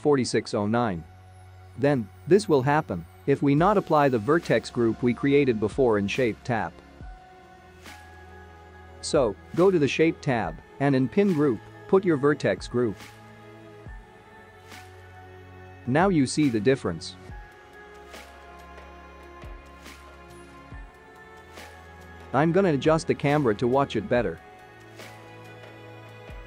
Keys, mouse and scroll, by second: 0.8 click, 1.1-1.5 scroll down 5, 1.6 scroll up 10, 3.1-3.6 scroll down 4, 4.0 click, 4.5 middle click, 5.6 space, 6.3 space, 8.0 click, 8.6-9.8 scroll down 10, 9.8 click, 10.1-11.3 scroll down 3, 11.3 click, 14.6 click, 15.3 space, 21.6 space, 22.3 click, 22.4 scroll down 1, 22.4 middle click, 22.6 shift+middle click, 22.9-23.2 scroll down 5, 23.1-24.2 scroll up 9, 23.3 click, 23.3 `, 23.6 shift+middle click, 23.9 ctrl+alt+KP_0, 24.3 middle click, 24.5 scroll down 2, 24.5 middle click, 24.6 click, 24.7 shift+a, 25.4 scroll down 4, 25.6 g, 25.8 middle click, 26.0 ctrl+click, 26.0 scroll up 5, 26.3 click.